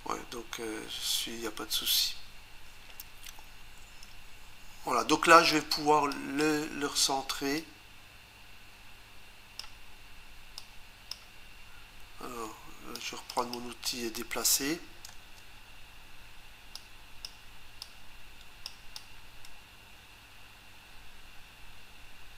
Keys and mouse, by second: 6.1 click, 7.6 click, 10.6 click, 12.9 click, 13.4 click, 16.7 click, 17.8 click, 18.9 click.